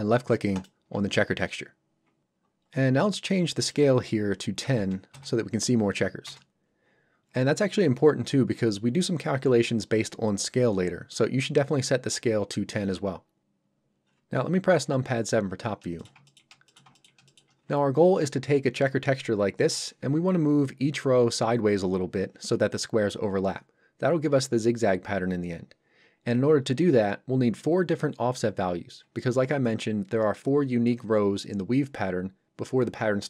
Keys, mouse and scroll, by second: 2.6 scroll up 1, 3.6 click, 4.6 KP_1, 6.2 Return, 14.8 KP_7, 15.4 scroll up 1, 16.0 shift+middle click, 16.2 ctrl+middle click, 16.6 shift+middle click, 17.0 ctrl+middle click.